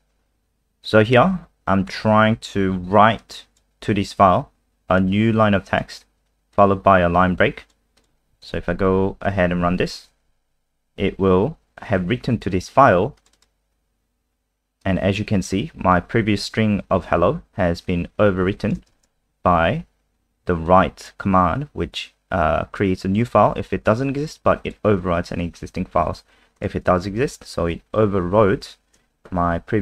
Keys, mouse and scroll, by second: 8.4 ctrl+s, 9.6 F5, 13.2 click, 13.3 click, 14.8 click, 18.9 click.